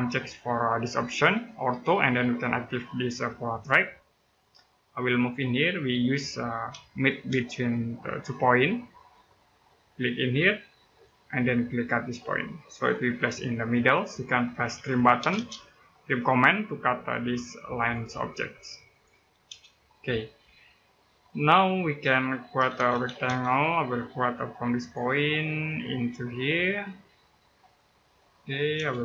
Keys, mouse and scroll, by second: 1.6 click, 4.2 middle click, 4.6-5.9 scroll up 1, 6.7 right click, 8.8 click, 14.3-15.1 typing, 17.6 click, 19.2 space, 19.5-19.9 scroll down 1, 19.9 middle click, 20.5-21.1 scroll up 1, 21.1 middle click, 22.1-23.2 typing, 23.5-24.5 scroll up 1, 24.5 click, 27.5 click, 27.8 middle click, 28.1 scroll up 1, 28.5 space.